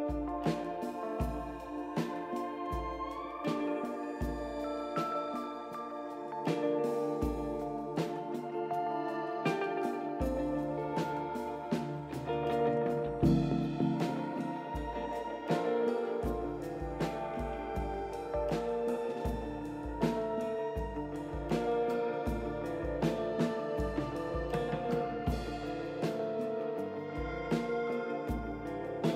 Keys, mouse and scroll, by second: 3.3 click, 6.5 click, 9.7 click, 10.8 scroll down 2, 11.1-12.4 right drag, 15.9 click, 17.0 click, 18.3 click, 19.5 right click, 20.9 click, 23.7 ctrl+click, 25.3 ctrl+click.